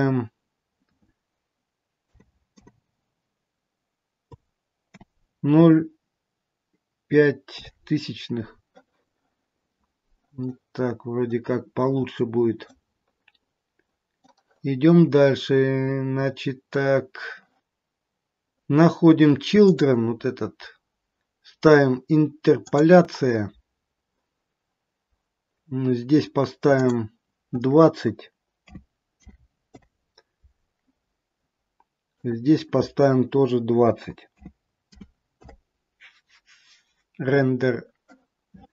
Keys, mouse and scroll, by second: 10.4 middle click, 12.8 middle click, 15.4 scroll down 2, 17.6-19.6 scroll down 1, 19.6 click, 20.7-23.6 scroll down 2, 23.6 click, 24.9-25.5 scroll down 1, 26.7 click, 32.4 click.